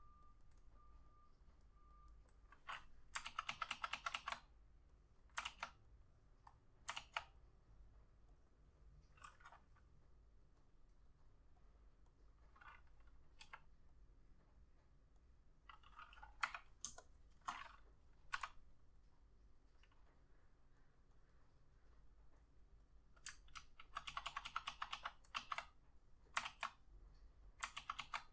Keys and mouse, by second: 3.4 ctrl+z, 3.6 ctrl+z, 3.9 ctrl+z, 4.1 ctrl+z, 4.3 ctrl+z, 5.6 ctrl+z, 7.1 ctrl+z, 13.6 e, 16.6 ], 17.0 space, 18.7 b, 21.3 double click, 23.7 ctrl+z, 24.2 ctrl+z, 24.4 ctrl+z, 24.6 ctrl+z, 24.8 ctrl+z, 25.1 ctrl+z, 25.5 ctrl+z, 26.6 ctrl+z, 27.9 ctrl+z, 28.1 ctrl+z.